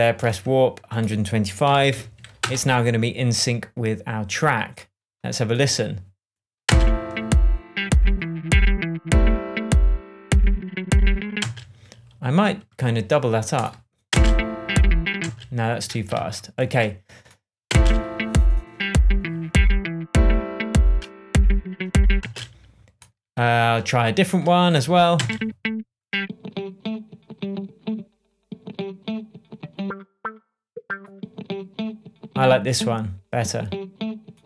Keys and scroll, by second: 1.4-2.4 typing, 6.6 space, 11.3 space, 14.0 space, 15.2 space, 16.1 super+z, 17.6 space, 22.1 space, 25.1 space.